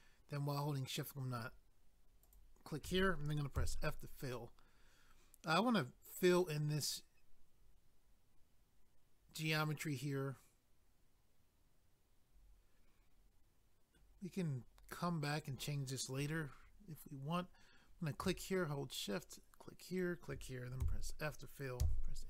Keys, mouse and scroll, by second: 2.2 shift+click, 3.6 f, 4.3 middle click, 6.4 middle click, 15.5 click, 19.1 shift+click, 19.9 shift+click, 20.8 f.